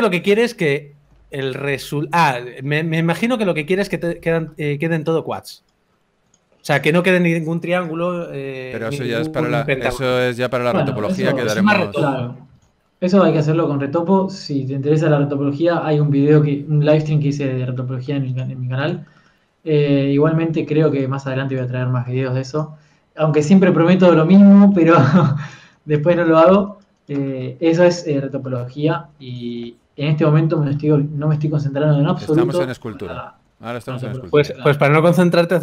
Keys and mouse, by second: 1.5 Tab, 1.5 ctrl+s, 1.5 ctrl+z, 1.8 ctrl+z, 2.3 ctrl+s, 2.7 Tab, 3.7 ctrl+s, 3.7 a, 6.1-10.1 drag, 10.6-11.7 drag, 11.7 middle click, 12.5 a, 13.5 ctrl+s, 15.0 middle click, 15.4 middle click, 17.8-19.5 middle drag, 19.5-20.9 right drag, 22.7 click, 23.6 g, 23.6 f, 26.0 f, 26.4 f, 30.1 ctrl+z, 30.3 f, 30.9 ctrl+z, 31.1 ctrl+z, 31.3 ctrl+z, 32.3 ctrl+z, 32.5 ctrl+z, 32.9 ctrl+z, 33.3 ctrl+z, 33.7 ctrl+z, 34.3 ctrl+z.